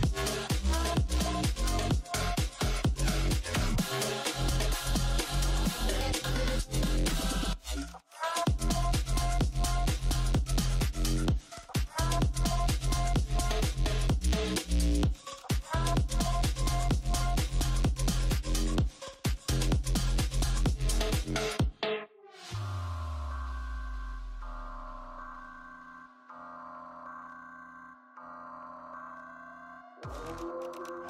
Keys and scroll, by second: 2.9-6.2 typing, 21.8 BackSpace, 23.5 d, 24.2 e, 25.3 b, 26.3 f, 28.4 3, 28.8 d.